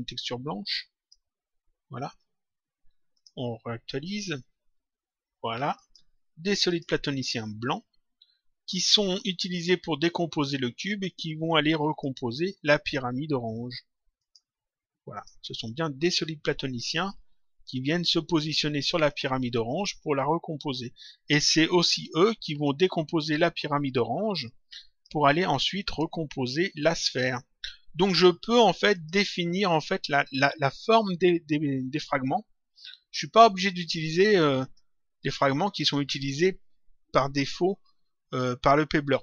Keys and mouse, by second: 3.1 click, 5.7 click, 11.8 click, 14.1 click, 19.0 click, 24.4 click, 25.8 click, 28.9 click, 30.1 click, 33.3 click.